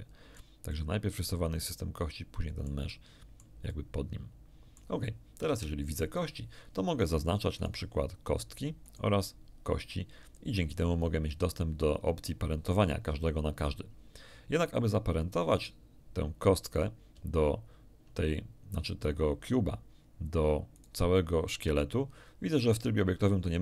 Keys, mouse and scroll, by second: 0.7-2.8 middle drag, 3.7-4.9 middle drag, 5.4 1, 7.5 right click, 8.8 right click, 15.5 right click, 19.9 scroll up 1, 20.7 right click.